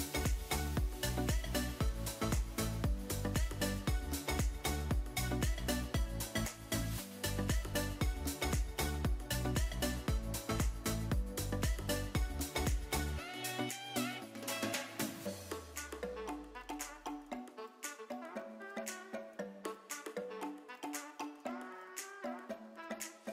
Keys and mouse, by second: 0.0 click, 0.6 ctrl+KP_Add, 1.4 g, 1.5 z, 2.7 click, 3.0 middle click, 4.1 click, 4.9 s, 5.7 click, 6.2 ctrl+KP_Add, 6.9 s, 8.3 click, 9.5 middle click, 10.2 middle click, 10.9 click, 11.4 s, 11.8 click, 12.3 middle click, 12.8 g, 13.4 click, 13.7 s, 14.2 click, 14.9-19.8 typing, 16.1 click, 16.6 click, 17.5 click, 18.2 click, 18.9 click, 19.5 click, 20.2 click, 20.5 middle click, 22.3 KP_3, 23.2 r.